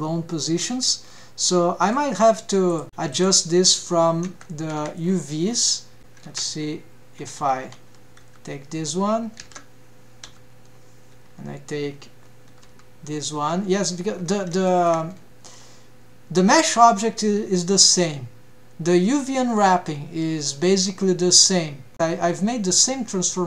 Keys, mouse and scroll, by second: 1.2-1.8 scroll down 4, 2.6 middle click, 3.0 middle click, 3.0 click, 3.8 click, 4.8 Tab, 5.3 a, 5.6-6.0 scroll down 4, 6.0 scroll up 2, 6.1 alt+a, 6.8 alt+a, 7.2 scroll up 1, 8.8 l, 9.6 scroll up 2, 10.0 alt+a, 10.8 l, 13.2 l, 14.7-15.3 scroll up 3, 15.3 shift+middle drag, 15.7-16.1 scroll down 2, 19.6-20.5 scroll down 4, 20.5-21.4 scroll up 4, 21.4 scroll up 2, 21.6-22.2 scroll down 4, 21.9 shift+middle click, 22.2 scroll up 1.